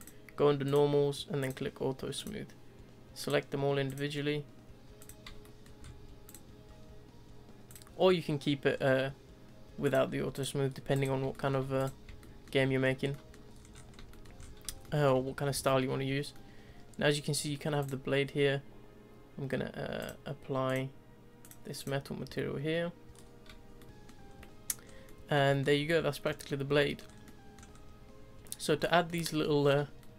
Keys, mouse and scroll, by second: 0.0-1.5 drag, 2.1 click, 3.2 click, 5.0 click, 5.4-5.8 shift+middle drag, 5.8-6.2 scroll up 1, 6.2 click, 7.7 click, 8.7-9.8 scroll down 2, 9.8 click, 10.3 click, 10.7 scroll down 1, 10.9 click, 11.3-11.8 shift+middle drag, 11.8 click, 12.2-12.8 shift+middle drag, 12.8-13.1 scroll down 2, 13.1 middle click, 13.5 scroll down 2, 13.7-14.1 scroll up 2, 14.1 shift+middle drag, 14.4-14.8 scroll up 2, 14.8 shift+middle drag, 15.1-15.5 scroll down 1, 15.5 z, 16.3-17.8 middle drag, 17.8 click, 20.0 click, 20.7-21.8 drag, 22.0-23.2 middle drag, 23.2-23.8 scroll down 3, 23.8-24.3 shift+middle drag, 24.3 scroll up 1, 24.4-24.8 middle drag, 24.8 scroll up 2, 25.0-25.5 middle drag, 25.5-25.9 shift+scroll up 1, 25.9-26.4 middle drag, 26.4 scroll down 1, 26.8 shift+middle drag, 27.1 shift+scroll up 2, 27.2-27.7 middle drag, 27.7-28.8 scroll up 2, 28.8 shift+scroll up 1, 28.8 shift+middle click, 29.6-30.0 scroll up 3, 30.0-30.1 middle drag.